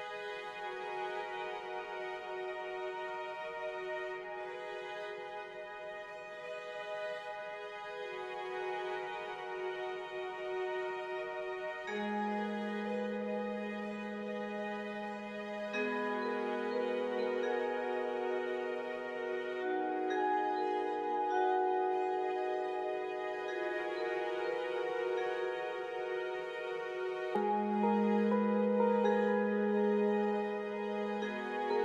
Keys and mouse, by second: 0.0 click, 1.4 middle click, 2.7 middle click, 4.2 KP_3, 5.0 Tab, 5.4 alt+z, 6.9 1, 8.1 2, 9.4-10.8 shift+drag, 12.4 typing, 12.4 shift+click, 13.8 shift+click, 16.4 alt+z, 17.6 1, 19.6 click, 20.2 alt+z, 22.8 g, 25.6 alt+z, 26.0 click, 26.5 alt+z, 29.2 g.